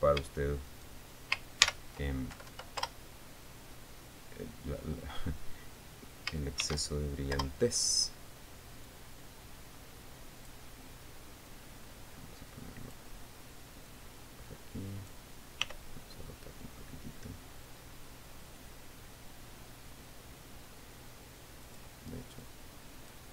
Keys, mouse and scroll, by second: 1.3 shift+right click, 2.2 ctrl+shift+l, 2.9 ctrl+Down, 3.4 ctrl+Return, 4.7 scroll down 2, 5.3-5.8 scroll down 4, 7.2 shift+d, 7.9 Return, 9.4-11.2 drag, 12.0-13.7 drag, 14.4-15.8 drag, 16.2 r, 22.2 click, 23.0 click.